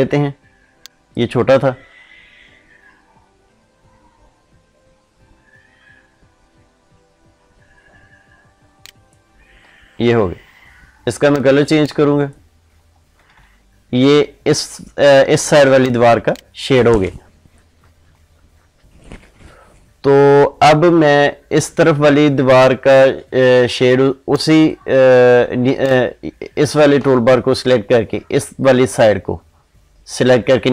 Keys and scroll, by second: 15.7 ctrl+space.